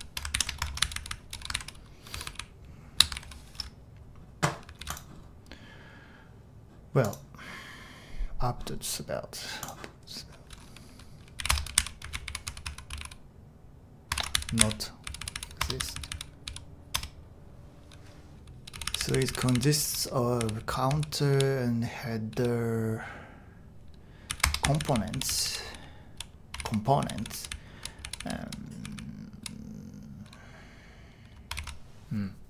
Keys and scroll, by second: 0.0-2.7 typing, 0.3 shift+super+l, 4.8 super+h, 11.2-22.3 typing, 17.0 Return, 24.3-25.4 typing, 27.0-27.7 typing, 30.8 typing.